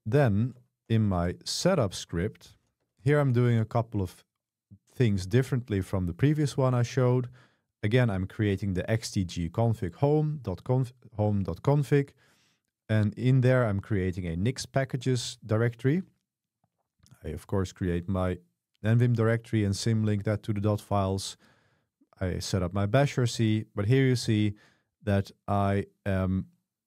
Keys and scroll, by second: 0.0-1.6 typing, 1.7 Return, 2.8 Escape, 2.9 Escape, 3.2 g, 7.5 j, 10.8 j, 11.7 j, 16.7 j, 16.9 j, 21.0 j, 21.4 j, 21.9 j, 22.3 j, 23.4 typing.